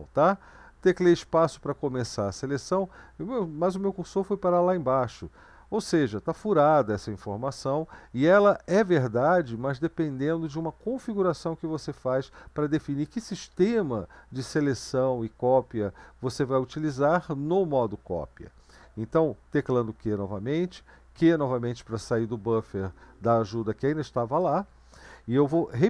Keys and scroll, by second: 2.0 space, 5.8 Up, 6.1 Up, 6.2 Up, 6.4 Up, 7.1 Up, 7.2-8.0 Up, 8.5 Down, 8.7 Down, 8.9 Down, 9.1 Down, 9.2 Down, 9.6 Down, 19.7 q, 21.1 typing.